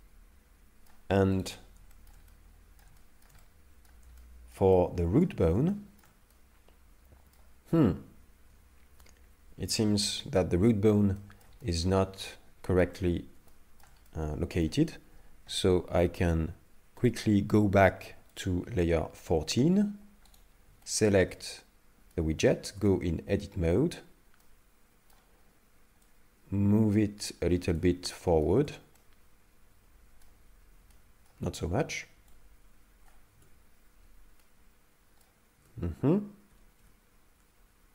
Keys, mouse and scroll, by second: 1.4 right click, 1.9 shift+middle click, 2.3 middle click, 3.0 shift+middle click, 3.4 middle click, 4.2 shift+middle click, 4.7 middle click, 5.7 shift+middle click, 6.3 middle click, 11.2 shift+middle click, 11.6 middle click, 13.5 shift+middle click, 14.1 middle click, 17.0 click, 18.4 click, 20.4 right click, 20.5 right click, 20.8 shift+middle click, 21.5 middle click, 22.8 Tab, 24.4 middle click, 26.1 click, 28.1 middle click, 28.6 Tab, 29.0 middle click, 30.9 middle click, 31.4 Tab, 32.3 click, 33.4 Tab, 34.4 middle click, 35.6 Tab, 36.5 g.